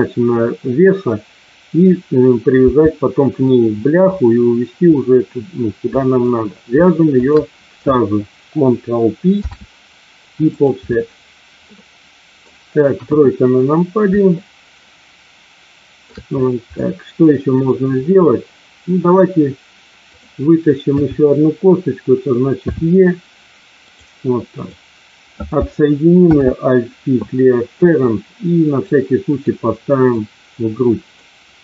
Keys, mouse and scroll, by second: 3.4 click, 5.0-6.2 middle drag, 9.2 ctrl+p, 11.7 middle click, 13.0 KP_1, 14.4-16.0 shift+middle drag, 16.7-17.7 middle drag, 20.1 click, 20.9 KP_3, 22.6 e, 24.5 click, 26.2 alt+p, 28.9 click, 30.1-31.1 drag.